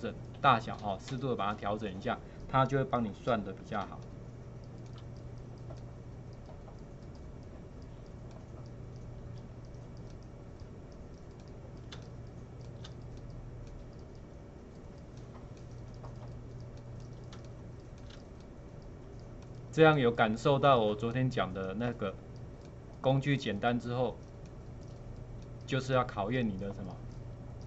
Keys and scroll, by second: 3.9 space, 12.0 space, 17.4 space.